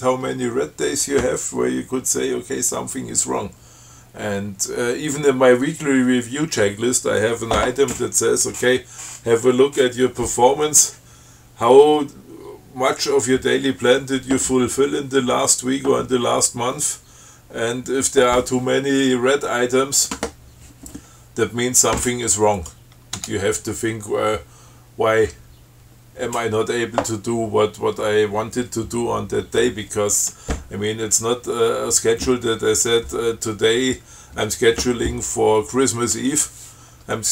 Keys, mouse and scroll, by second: 22.8 click, 23.4 Tab.